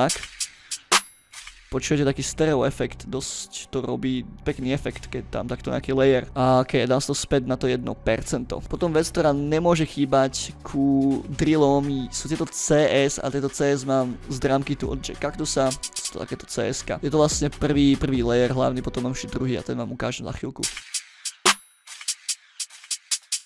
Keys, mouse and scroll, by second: 0.0 space, 0.1-1.2 drag, 1.3 space, 1.4 click, 2.0-6.3 drag, 6.5 click, 7.2-7.5 drag, 8.7 ctrl+scroll down 2, 9.7 ctrl+middle click, 10.2 ctrl+scroll up 2, 11.1 click, 11.5 ctrl+middle click, 12.5 click, 13.1-13.7 scroll down 1, 13.7-14.1 scroll down 1, 15.6 click, 15.7 click, 15.8 click, 15.9 click, 16.9-17.4 scroll down 4, 18.0 ctrl+scroll down 2, 19.5-20.1 middle drag, 20.5 space, 22.3 middle click.